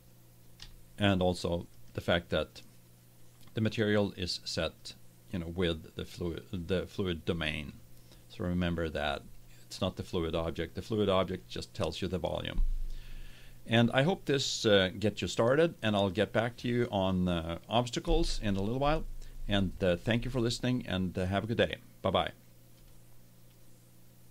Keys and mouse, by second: 1.7-3.2 middle drag, 3.2 right click, 3.3 middle click, 3.4 right click, 4.8-6.6 drag.